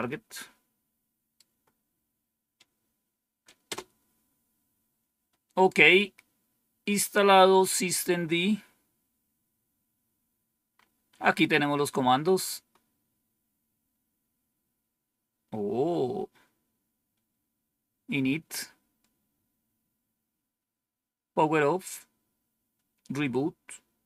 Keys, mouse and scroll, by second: 0.3-1.3 right drag, 3.6 Return, 6.5-7.7 scroll down 1, 7.7 scroll down 1, 8.4-9.0 scroll down 1, 9.5-10.5 scroll down 1, 10.7-12.9 scroll up 1, 12.9-13.7 scroll down 1, 16.2 scroll down 1, 17.2 scroll down 2, 18.1-18.8 scroll down 2, 18.9-19.6 scroll down 2, 19.8-20.5 scroll down 2, 20.5-21.2 scroll down 1, 23.5 scroll down 2.